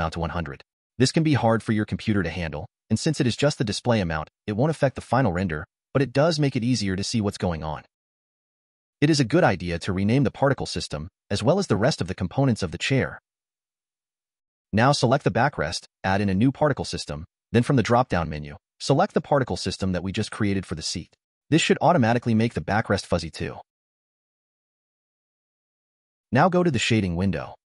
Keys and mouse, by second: 2.5-4.7 drag, 5.1-8.8 middle drag, 10.3-12.4 drag, 12.0 z, 14.1 click, 15.5 click, 16.9-18.7 drag, 19.5-20.8 middle drag, 21.2 click, 21.8-23.2 middle drag.